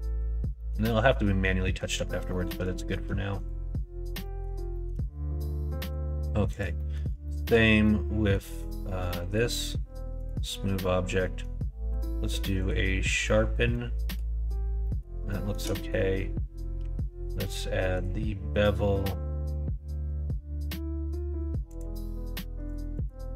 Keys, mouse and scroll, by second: 0.5 middle click, 1.5 middle click, 2.2 middle click, 2.6 shift+middle click, 3.2 click, 4.1 middle click, 4.6 shift+middle click, 5.6 middle click, 6.4 click, 6.7 middle click, 7.1 shift+middle click, 7.7 middle click, 9.2 right click, 11.0 middle click, 11.8 q, 13.6 middle click, 14.7 middle click, 15.2 shift+middle click, 15.6 middle click, 16.7 q, 22.6 click, 22.8-23.3 drag.